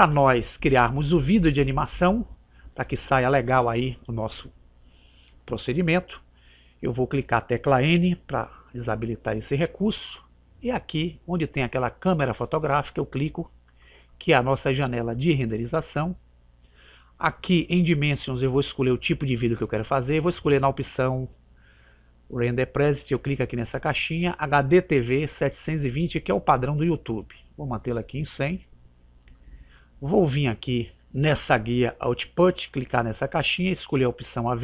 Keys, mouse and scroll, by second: 9.1 n, 13.9 click, 23.4 click, 29.4 click, 33.4 click.